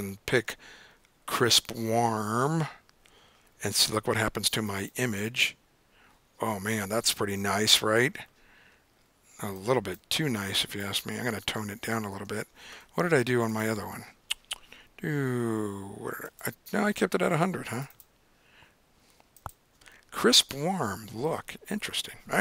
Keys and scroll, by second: 11.7 super+Tab, 12.2 super+Tab.